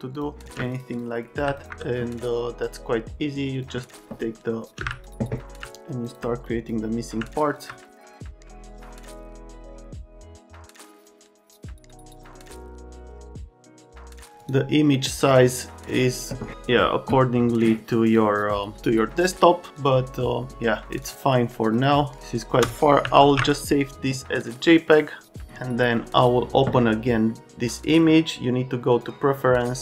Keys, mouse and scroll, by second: 0.6 ctrl+space, 4.8 space, 11.2 space, 12.3 space, 13.5 ctrl+alt+space, 14.0 ctrl+alt+space, 20.8 ctrl+space, 23.2 ctrl+alt+s.